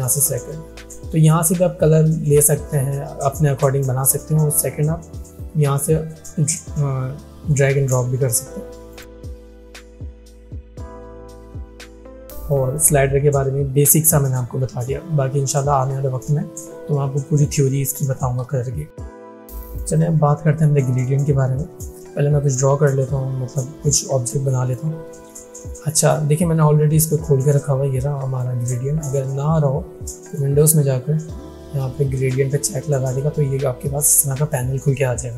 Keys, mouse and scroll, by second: 5.4-7.9 drag, 19.5 click, 22.4-24.8 drag, 27.5-28.5 drag.